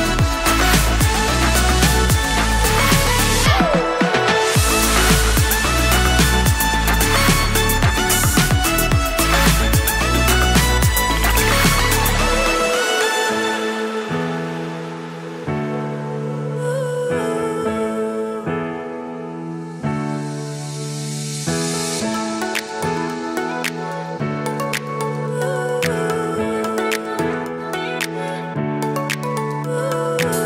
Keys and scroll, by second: 0.6 super+k, 0.7 super+b, 5.2 super+s, 12.3 super+s, 13.2 super+s, 17.9 super+s, 21.3 super+s, 24.6 super+s.